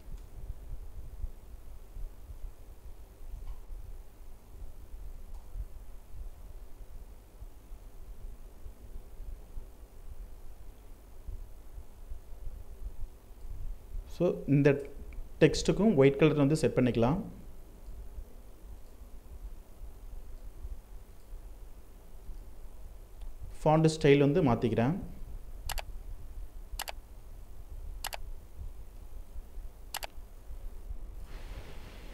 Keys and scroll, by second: 1.5 ctrl+Left, 4.4 ctrl+Return, 30.9 ctrl+t.